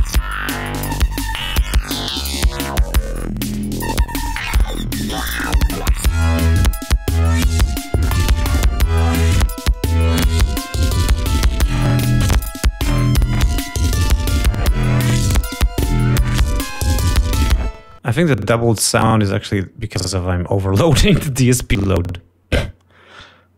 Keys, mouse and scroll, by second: 1.3 click, 3.7 click, 6.0-7.3 drag, 7.3-8.3 scroll down 6, 8.5-9.6 drag, 9.6 scroll down 1, 9.9 click, 17.8 click.